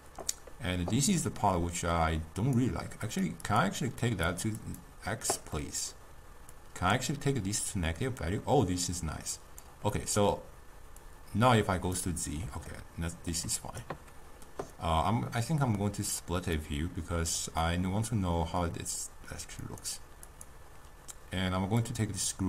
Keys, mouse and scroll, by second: 3.1-4.5 drag, 4.7 click, 5.6-6.6 middle drag, 6.6-9.7 drag, 10.0-11.2 middle drag, 11.2 click, 12.8-15.8 ctrl+middle drag, 16.6-17.7 drag, 17.7-22.1 middle drag, 22.1-22.4 drag.